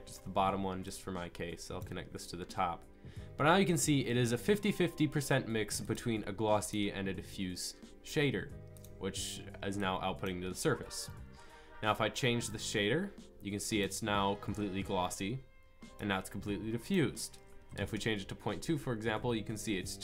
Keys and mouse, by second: 1.8 click, 12.5-14.8 drag, 15.2 click, 18.7-20.0 middle drag.